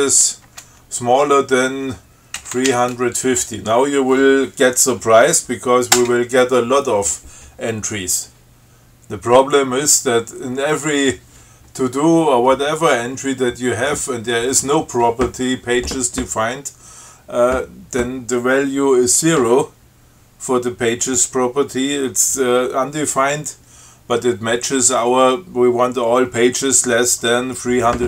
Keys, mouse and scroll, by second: 0.0-1.3 typing, 2.4-3.4 typing, 6.2 Return.